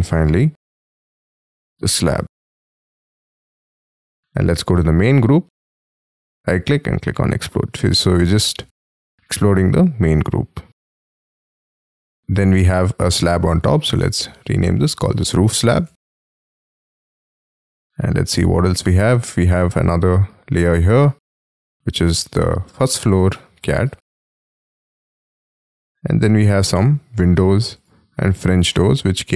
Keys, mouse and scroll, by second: 0.0 double click, 0.7-3.0 typing, 3.3-4.7 scroll up 1, 4.7-5.4 scroll up 1, 5.4 right click, 9.1-10.9 scroll down 1, 10.9-12.2 scroll up 5, 14.8-16.5 typing, 16.8-17.7 scroll up 4, 20.2 double click, 21.5 double click, 22.7-24.3 typing, 24.7-25.7 scroll up 3, 28.1 double click, 28.6 double click, 28.8 middle click.